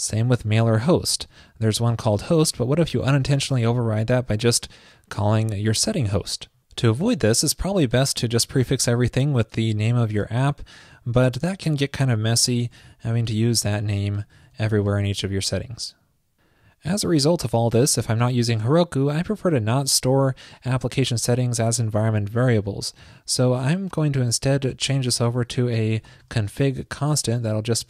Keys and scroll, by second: 11.2 super+c, 12.0 super+v, 14.5 super+v, 27.5 alt+shift+Left.